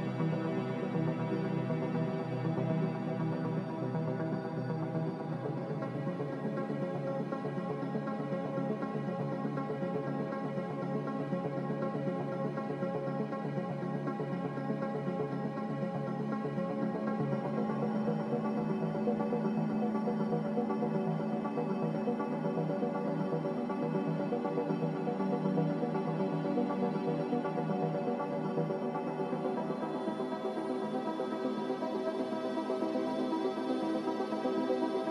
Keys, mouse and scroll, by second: 0.6-1.7 typing, 4.5-5.4 typing, 6.9 click, 10.6 click, 11.6-12.7 typing, 17.1 a, 24.0-24.7 typing, 29.7-30.5 typing, 32.2 click.